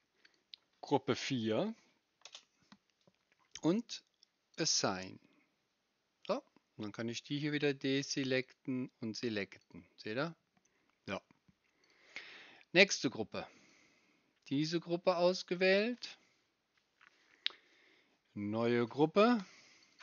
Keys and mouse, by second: 19.9 right click.